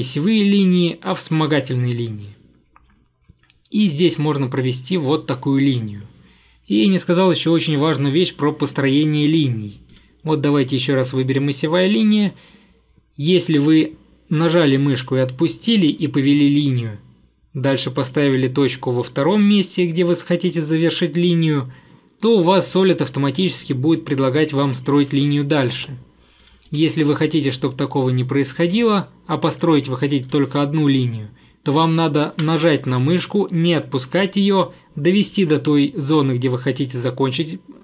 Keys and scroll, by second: 25.7 Escape, 25.9 Escape, 26.7 Delete.